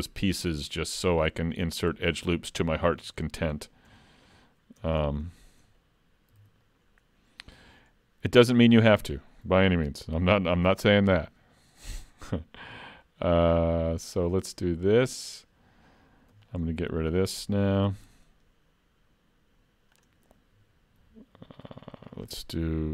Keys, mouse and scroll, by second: 0.6 middle click, 1.3 shift+middle click, 2.7 middle click, 3.3 shift+middle click, 3.9 Tab, 4.8 Tab, 5.0 scroll up 2, 5.3 shift+middle click, 5.8 middle click, 6.4 alt+a, 6.6 middle click, 7.4 middle click, 7.6 shift+middle click, 10.8 ctrl+r, 16.4 alt+click, 17.9 x, 22.0 ctrl+r.